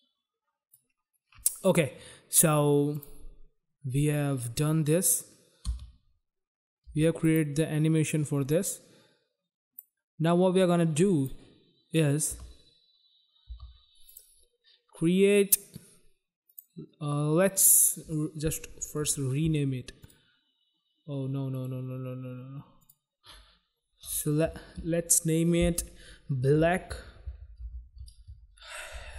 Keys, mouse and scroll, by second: 3.0 click, 3.0 click, 4.4 click, 5.7 space, 6.9 space, 7.3 click, 7.4 click, 8.7 click, 10.7 click, 12.4 space, 13.5 space, 14.1 click, 14.2 click, 16.5 click, 16.6 click, 18.9 right click, 19.1 right click, 20.0 click, 20.1 click, 21.6 right click, 21.7 right click, 22.8 click, 22.9 click, 26.2-29.1 typing.